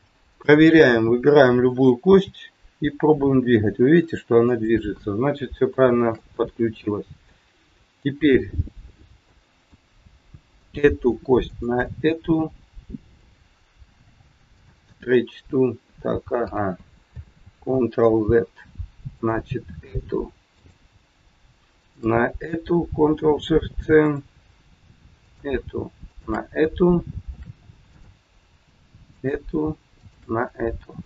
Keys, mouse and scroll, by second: 0.2 click, 2.1 g, 5.7 shift+middle click, 6.2 middle click, 9.3 middle click, 10.6 click, 11.3 shift+click, 13.9 ctrl+shift+c, 17.5 ctrl+z, 19.1 click, 20.4 click, 21.7 shift+click, 21.8 shift+click, 23.2 ctrl+shift+c, 25.2 click, 26.1 shift+click, 27.2 ctrl+shift+c, 29.1 click, 29.8 shift+click.